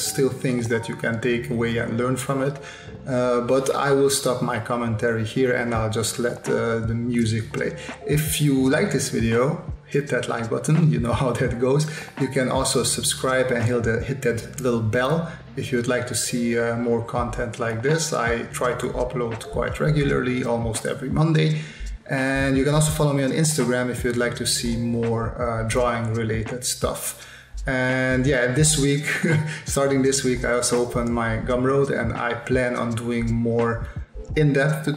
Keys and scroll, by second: 0.5 space, 1.9 space, 2.6 space, 5.3 space, 7.0 s, 8.0-10.7 typing, 12.5 space, 15.3 space, 15.9 space, 16.2 s, 17.1 space, 18.2 s, 19.2 s, 20.9 s, 22.1 space, 23.3 space, 24.3 space, 25.6-29.8 typing, 30.9-34.9 typing.